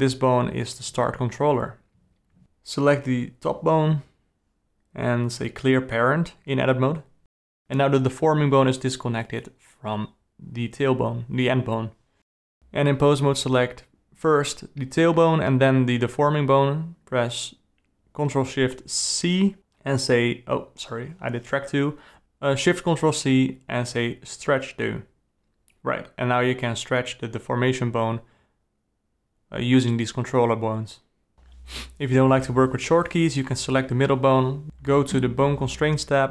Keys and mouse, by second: 1.8 click, 2.2 g, 4.5 alt+p, 6.0 alt+a, 6.5 g, 7.6 Tab, 8.4 click, 8.9 g, 10.0 click, 10.2 g, 11.6 click, 12.1 g, 13.2 click, 14.8 click, 16.2 ctrl+shift+c, 20.5 ctrl+z, 22.0 ctrl+shift+c, 24.0 alt+a, 24.2 click, 24.4 g, 31.0 ctrl+z, 31.5 ctrl+z, 32.0 ctrl+z, 32.5 alt+a, 32.6 click, 34.9 ctrl+z, 35.2-36.0 drag.